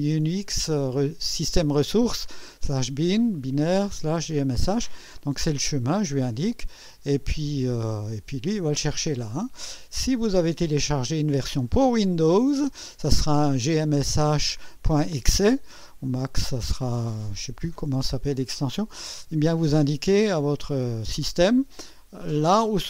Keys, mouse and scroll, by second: 8.0 click, 20.2 click.